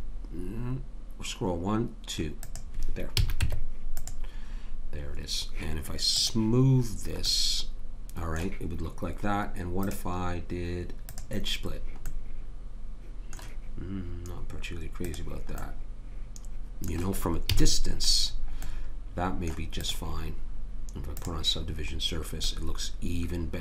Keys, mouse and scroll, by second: 3.1 a, 3.4 Tab, 6.2 click, 6.9-9.8 middle drag, 9.8 click, 12.1-13.1 middle drag, 15.0 click, 15.6 right click, 17.6 a, 19.8-22.8 drag, 22.6-23.6 middle drag.